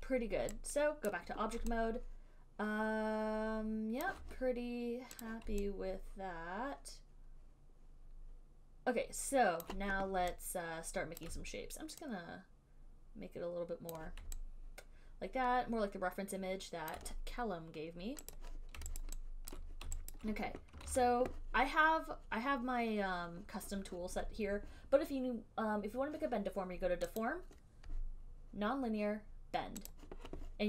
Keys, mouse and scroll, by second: 1.3 click, 4.2 alt+click, 5.5 click, 9.5 click, 9.8 alt+click, 11.4 alt+click, 14.1 click, 18.6 click, 19.2 alt+click, 19.7 alt+click, 20.3 alt+click, 21.2 ctrl+z, 27.4 click, 30.1 click.